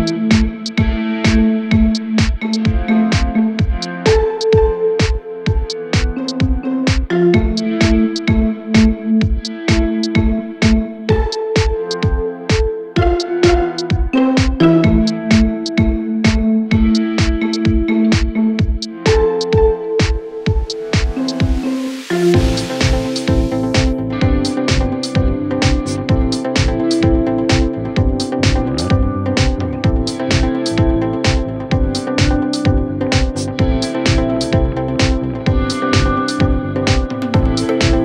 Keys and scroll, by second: 0.6 ], 1.7 4, 2.6 Delete, 4.6 3, 12.6 ], 16.8 ], 18.4 ], 20.1 4, 25.3 3, 26.1 ], 26.4 ], 32.7 ], 36.1 ].